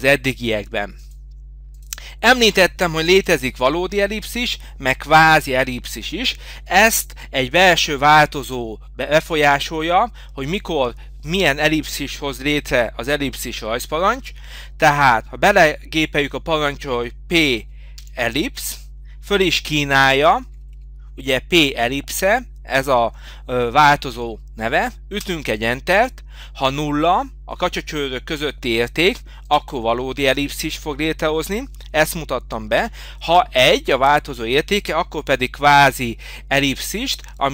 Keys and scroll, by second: 3.2 Delete, 20.3 Down, 20.7 Up, 21.5 Up, 25.3 Return.